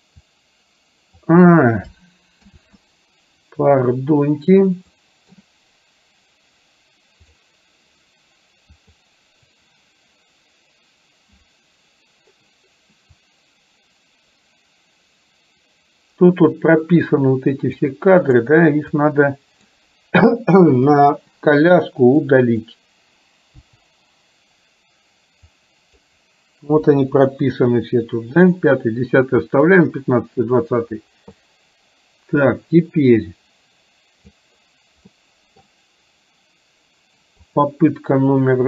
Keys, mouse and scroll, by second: 0.2-1.3 drag, 2.6 ctrl+z, 4.9 middle click, 8.9 click, 13.3-17.9 drag, 18.2 click, 18.9-19.8 drag, 20.9 Delete, 22.4 click, 23.7 Delete, 25.7-26.1 drag, 26.8 Delete, 31.4-34.6 drag, 35.2-35.7 middle drag, 37.6 click.